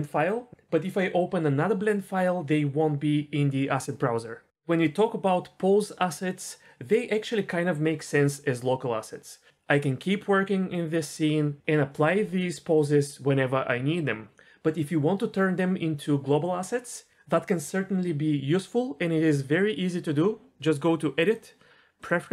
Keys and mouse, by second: 21.4-22.2 drag.